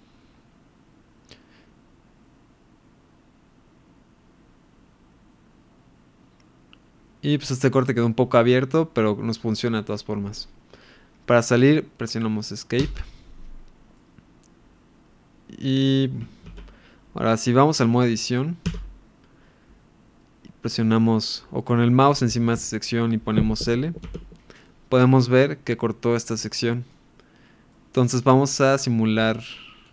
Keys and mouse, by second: 12.8 Escape, 13.9-14.5 middle drag, 14.6-15.9 middle drag, 16.5 ctrl+s, 17.8-18.2 middle drag, 19.1 Tab, 25.0-26.9 middle drag, 27.7 middle click.